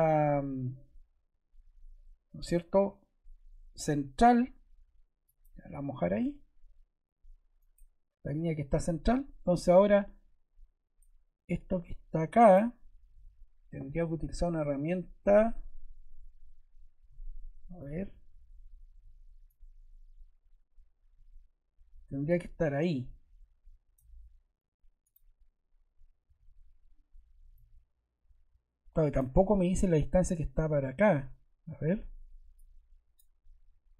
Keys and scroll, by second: 6.1 Escape, 9.0 Escape, 17.7 m, 26.2 Escape.